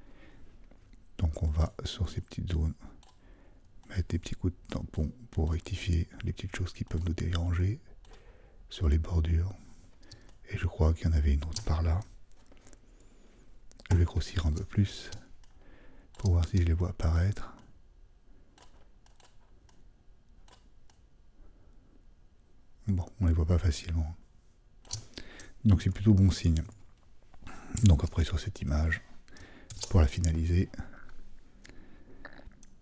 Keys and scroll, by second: 13.9 super++, 25.8 super+-, 26.2 super+-, 27.8 super+-, 28.2 super+-, 29.7 super+0.